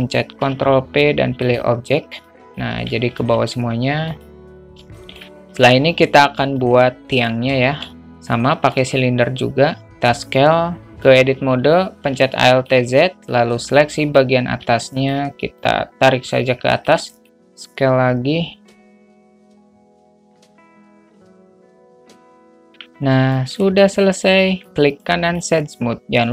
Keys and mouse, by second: 0.7 ctrl+p, 2.5 click, 3.0 ctrl+z, 5.3 shift+middle click, 6.9 alt+shift+middle click, 7.5 drag, 8.0 shift+a, 9.9 s, 10.9 Tab, 12.3 alt+z, 12.7 alt+shift+middle click, 13.8 click, 14.9 shift+a, 15.2 shift+middle click, 15.3 shift+a, 15.9-17.2 drag, 17.2 shift+a, 18.9-21.4 typing, 19.0 middle click, 19.2 click, 20.1 Tab, 20.2 click, 20.5 middle click, 20.7 shift+middle click, 20.8 middle click, 21.3 Tab, 21.6 click, 22.0 Tab, 22.1 Tab, 22.2 click, 22.8 Tab, 22.9 alt+z, 23.6 alt+middle click, 24.7 middle click, 25.2 right click, 26.1 q.